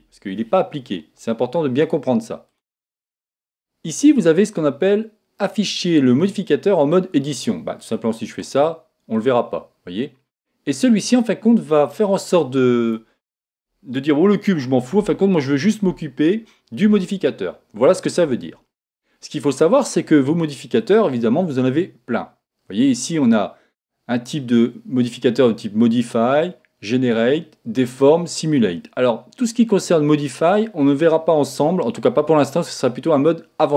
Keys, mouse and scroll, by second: 0.0 Escape, 2.5 click, 7.8-10.9 drag, 11.7 click, 20.8 click.